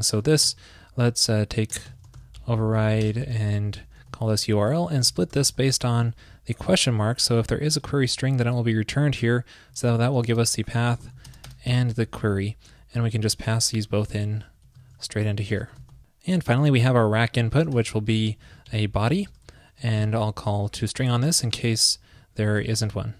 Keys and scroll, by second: 0.4 super+Right, 4.5 super+Right, 6.5 super+Right, 7.6 super+Left, 9.6 super+Left, 12.1 super+Right, 13.1 alt+shift+Left, 14.9 shift+super+Right, 16.7 super+Right, 22.6 super+s.